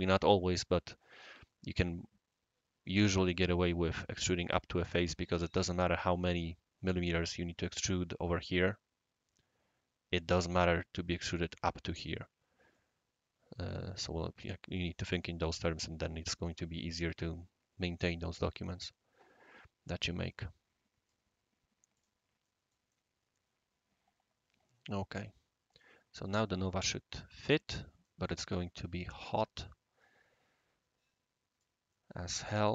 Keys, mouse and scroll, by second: 11.9 click, 12.7-14.0 right drag, 18.1-21.1 right drag, 21.9 click, 22.4-22.7 middle drag, 22.9-28.0 right drag, 28.3 scroll up 1, 28.6 scroll down 1, 28.6 scroll up 1, 29.1-29.4 middle drag, 29.5 middle click, 29.6-31.6 right drag, 31.9-32.5 middle drag, 32.5-32.7 right drag, 32.6-32.7 middle drag.